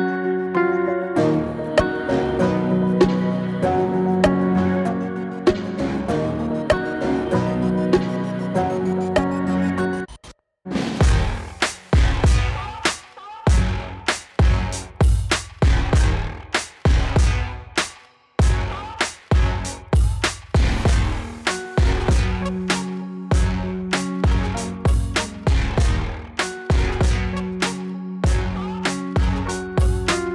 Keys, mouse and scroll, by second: 2.2 click, 3.9 Return, 6.0 click, 7.2 space, 10.2 space, 10.9-12.9 drag, 13.6 click, 13.7-26.9 drag, 28.3 Return.